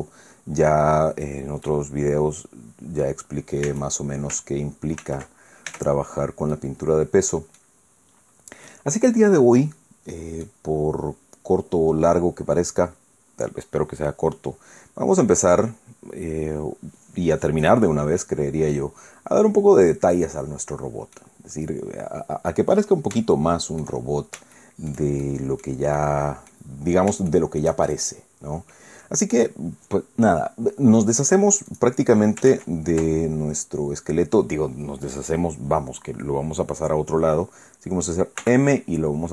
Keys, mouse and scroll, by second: 1.0 scroll down 2, 1.6-3.2 drag, 3.7 Tab, 5.0 ctrl+n, 5.7 Tab, 6.5-7.8 drag, 8.7-10.6 drag, 11.2-11.8 scroll up 1, 12.0 scroll down 1, 18.2-21.4 drag, 21.5-21.9 scroll up 1, 22.0 scroll down 1, 23.3 shift+scroll down 1, 23.4 shift+click, 24.2 shift+scroll down 1, 24.6 shift+click, 25.2 shift+click, 26.0 click, 26.8-27.1 scroll up 1, 27.3 shift+click, 28.0 shift+right click, 31.7 right click, 32.5 ctrl+Tab, 33.6-34.2 scroll down 2, 34.3 scroll up 2, 35.0 scroll down 2, 38.4 m.